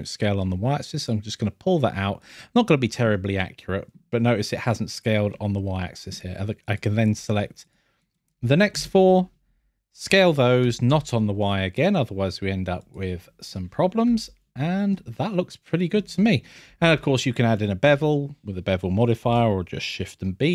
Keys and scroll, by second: 8.7 n, 13.5 scroll, 14.6 scroll, 15.9 scroll.